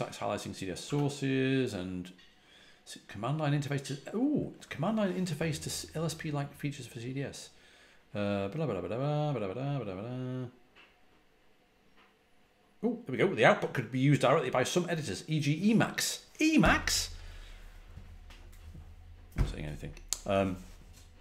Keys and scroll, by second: 0.7 typing.